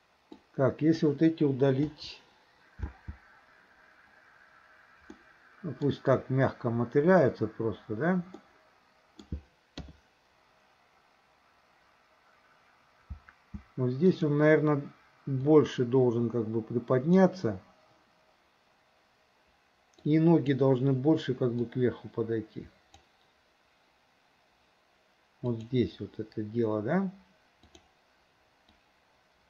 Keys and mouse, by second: 0.3-1.1 drag, 1.9 Delete, 2.9 space, 5.1-6.0 middle drag, 8.5 middle click, 9.8 KP_3, 13.1 space, 14.1 click, 15.4 click, 15.8 click, 20.2 click, 21.8-23.1 drag, 25.6 click, 27.6 click, 28.9-29.4 drag.